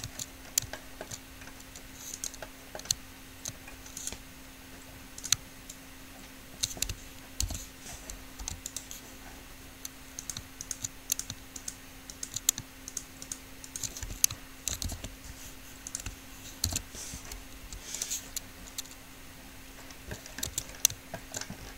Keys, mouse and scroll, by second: 2.4-4.2 middle drag, 4.2-5.2 right drag, 5.2 middle click, 5.9-7.0 drag, 5.9-7.0 right drag, 7.7 alt+p, 8.7 u, 12.0-15.2 drag, 15.2 alt+p, 16.2-18.2 drag, 16.9 alt+p, 17.8 u, 20.7 Tab.